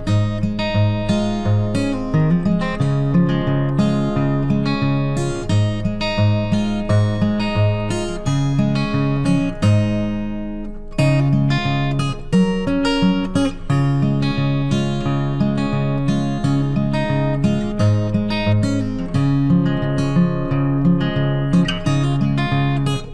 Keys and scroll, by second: 1.4 ctrl+t, 9.0 ctrl+t, 18.6 ctrl+t.